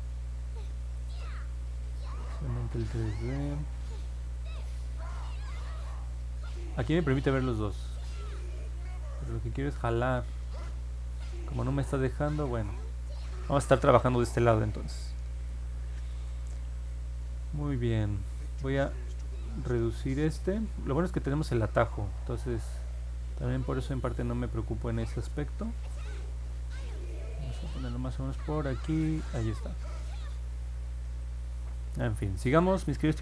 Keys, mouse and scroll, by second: 3.4-8.9 drag, 9.3-11.2 drag, 20.6-29.9 drag, 31.2-32.9 alt+drag.